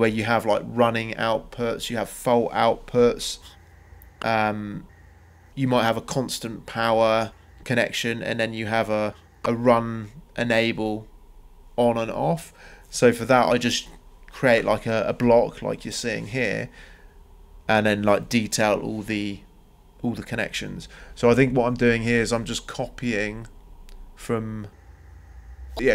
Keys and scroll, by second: 4.7 ctrl+c, 4.8 ctrl+v, 7.5-14.7 typing, 16.8 Escape, 20.3 Escape.